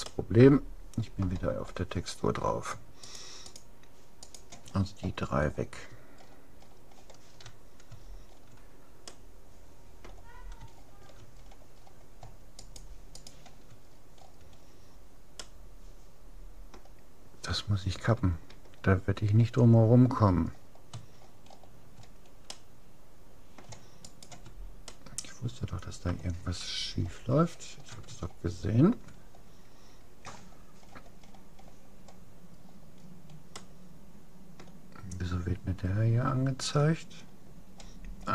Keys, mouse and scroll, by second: 2.0-4.3 middle drag, 3.1-5.9 right drag, 4.9-7.3 middle drag, 8.1-8.9 scroll up 1, 8.9 scroll down 1, 9.1-11.5 middle drag, 11.5-12.7 scroll down 1, 12.7-14.7 right drag, 14.7-17.1 middle drag, 20.5-21.5 middle drag, 22.5-24.5 middle drag, 24.1-25.7 right drag, 24.9-26.5 middle drag, 27.3-30.7 middle drag, 30.9-31.9 middle drag, 32.7 middle click, 33.7-35.3 middle drag, 35.9-38.3 middle drag.